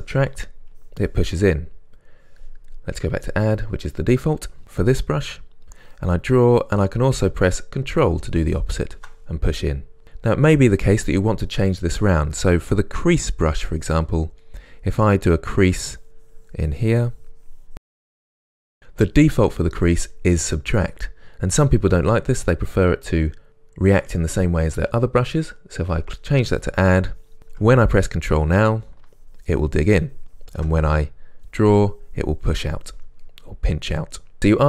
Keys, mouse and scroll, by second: 0.0 middle click, 0.8-3.4 drag, 5.7-10.0 drag, 10.0-13.5 middle drag, 13.5 click, 13.6-15.7 middle drag, 15.7-26.0 drag, 26.0-27.1 middle drag, 27.1-33.3 drag, 33.3-34.6 middle drag.